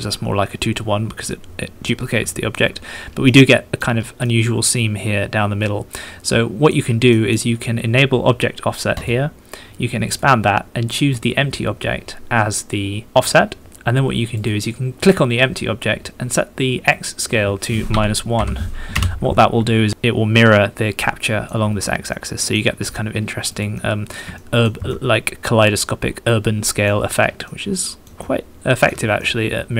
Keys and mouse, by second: 2.3 shift+middle click, 3.2 middle click, 3.3 middle click, 4.0 middle click, 5.0 middle click, 5.8 middle click, 6.2 middle click, 7.1 middle click, 9.4 middle click, 10.0 middle click, 11.1-13.1 middle drag, 17.0-19.5 middle drag, 20.2-21.3 shift+middle drag, 21.3 shift+middle click, 22.1 middle click, 23.7 middle click, 24.3 shift+click, 24.5 shift+middle click, 25.0 middle click, 25.5 middle click, 25.9 middle click, 26.5 middle click, 27.4 middle click, 27.8 middle click, 28.2 shift+middle click, 28.9 middle click, 29.1 middle click, 29.4 middle click.